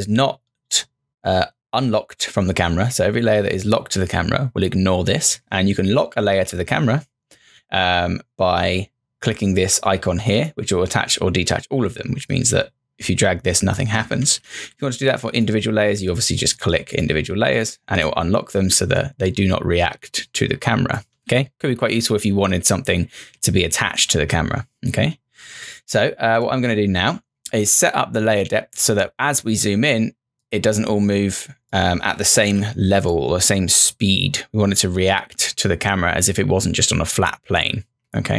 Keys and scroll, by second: 14.2 ctrl+z, 21.2 ctrl+z, 22.8 ctrl+z, 23.2 ctrl+z, 32.4 ctrl+z, 37.6 ctrl+z.